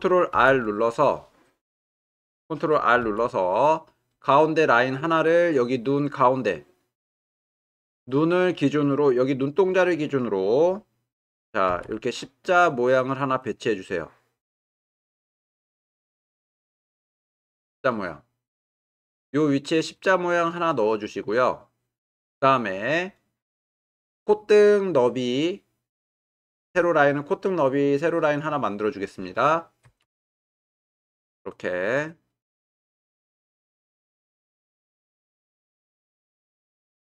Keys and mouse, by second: 3.0 ctrl+r, 11.7 ctrl+r, 29.9 ctrl+r.